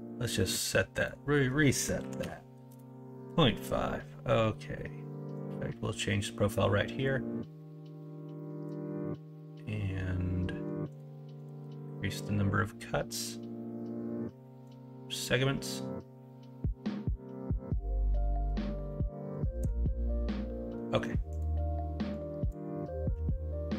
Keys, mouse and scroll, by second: 11.3-21.3 drag.